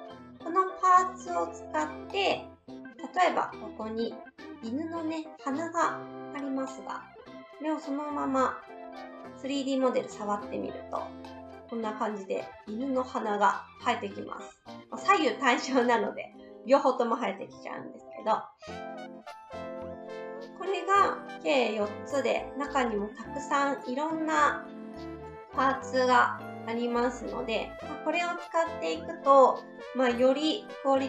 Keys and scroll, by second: 18.2 ctrl+z.